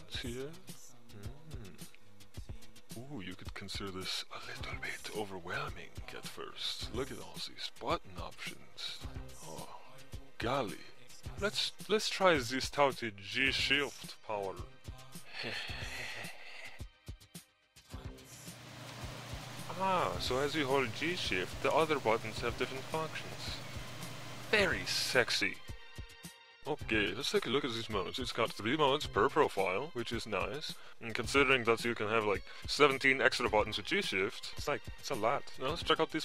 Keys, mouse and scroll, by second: 3.2-7.1 typing, 3.2-16.0 drag, 16.5 shift+click, 18.3 click, 18.9 1, 24.0 shift+1, 29.7 click.